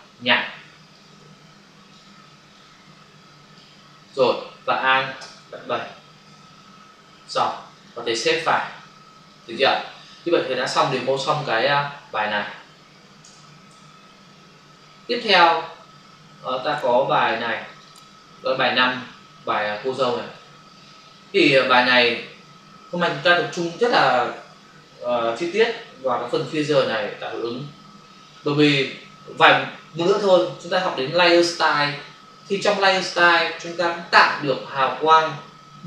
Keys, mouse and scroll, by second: 0.9 click, 2.5 click, 4.1 click, 5.2 alt+BackSpace, 6.2 ctrl+d, 7.6 v, 8.4 ctrl+s, 13.2 ctrl+alt+w, 14.0 ctrl+alt+n, 15.2 click, 17.2 click, 17.6 click, 17.7 double click, 17.9 click, 18.8 click, 19.7 click.